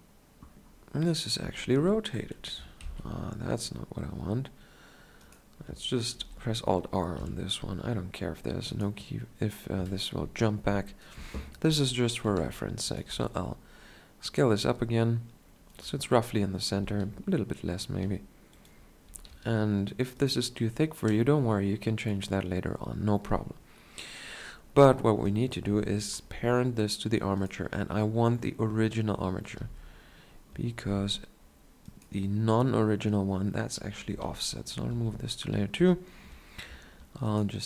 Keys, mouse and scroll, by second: 3.0 shift+Left, 6.3 alt+r, 7.3 KP_1, 12.4 s, 13.3 s, 16.7-18.1 drag, 17.1 s, 18.1 s, 19.3-22.4 drag, 19.3 s, 22.4-25.4 middle drag, 25.4-29.8 drag, 29.8 1, 33.3-34.3 drag, 34.3 m, 35.1 2.